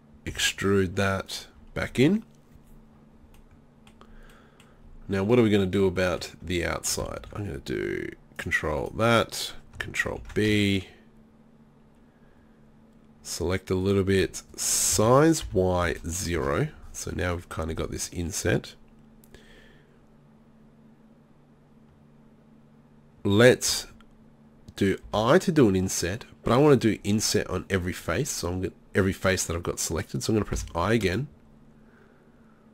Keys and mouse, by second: 0.3 e, 1.4-3.5 drag, 7.2 ctrl+r, 10.2 ctrl+b, 14.0-15.0 drag, 15.0 s.